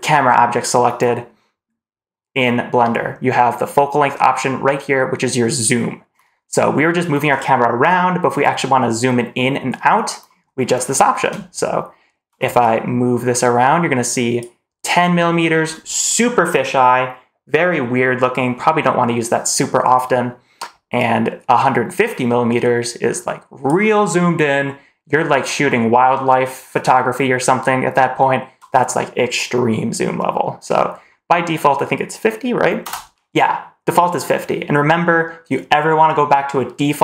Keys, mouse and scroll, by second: 12.5-14.3 drag, 20.9-23.5 drag, 32.7 BackSpace.